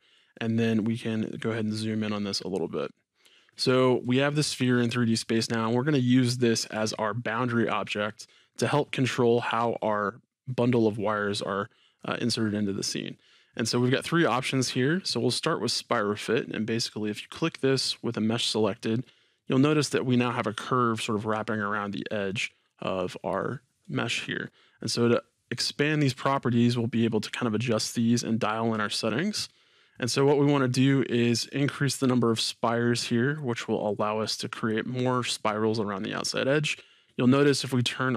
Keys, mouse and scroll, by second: 1.1-2.1 scroll up 2, 2.1 scroll down 2, 2.2-4.0 scroll up 2, 4.0-13.6 middle drag, 17.3 click, 19.0 middle click, 26.2 click, 29.1-31.6 middle drag, 31.6-34.4 drag, 34.4-38.1 middle drag.